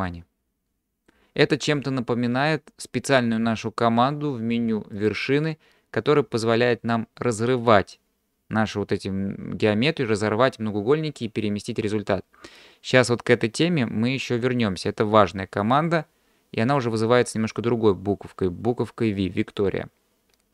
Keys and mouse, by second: 5.0-14.4 drag.